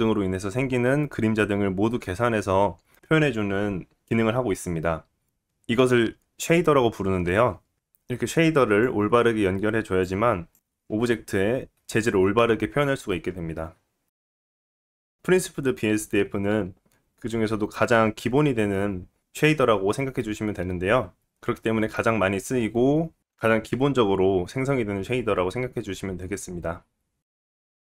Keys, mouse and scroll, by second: 10.8-22.6 drag, 14.9 Delete, 22.6-26.8 middle drag, 24.0-25.7 scroll down 1, 26.8 scroll down 1.